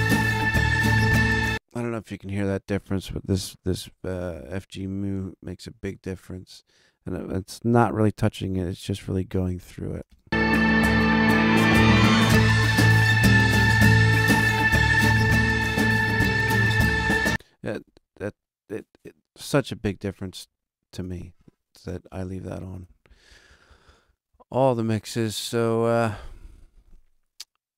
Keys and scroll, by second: 10.0 space.